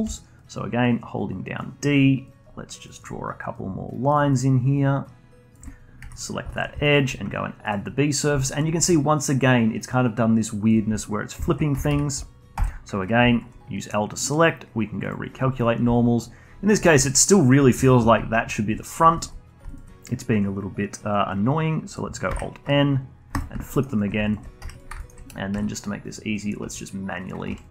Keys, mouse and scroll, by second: 0.0-6.0 typing, 0.8 click, 2.2 click, 3.5 click, 4.7 click, 6.1 click, 6.4 alt+click, 6.8-8.1 shift+right drag, 8.1 scroll up 1, 8.3-11.2 alt+drag, 11.2 scroll down 1, 11.4 alt+click, 11.7 a, 11.8 a, 12.5 l, 13.2-15.5 alt+drag, 15.5-15.9 scroll up 1, 15.9-22.3 alt+drag, 22.3 alt+n, 23.7 alt+middle click, 23.8-24.6 alt+drag, 24.6 2, 24.7 drag, 24.9-25.5 alt+middle drag, 25.5 e, 26.6-27.7 typing, 27.6 click.